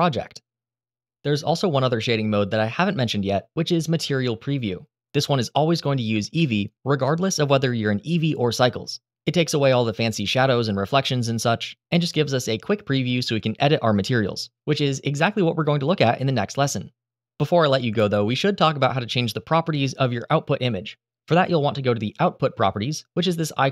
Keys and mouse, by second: 4.3-23.5 drag.